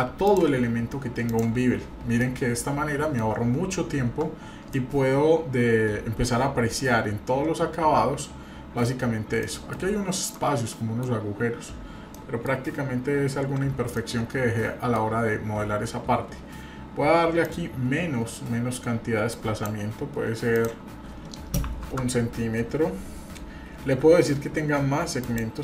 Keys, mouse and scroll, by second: 1.5 click, 2.2-3.2 middle drag, 3.7-4.2 scroll up 2, 4.2 scroll down 1, 4.7-9.0 shift+middle drag, 9.2 scroll down 1, 9.4-9.7 middle drag, 9.9-10.3 scroll up 2, 10.3-11.0 middle drag, 11.0-11.4 scroll down 1, 11.6-12.1 scroll up 1, 12.1-12.6 shift+middle drag, 13.0 scroll down 1, 13.9-15.0 shift+middle drag, 17.4-19.8 drag, 20.5-22.1 drag, 25.2 click.